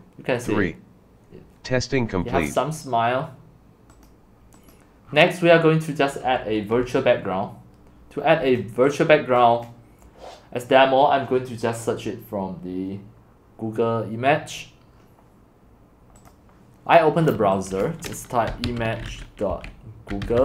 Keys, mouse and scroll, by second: 4.1-5.1 drag, 5.1 scroll, 6.2 scroll, 6.3 middle click, 6.8-8.2 c, 8.4 c, 8.6-11.0 drag, 18.6-20.4 typing.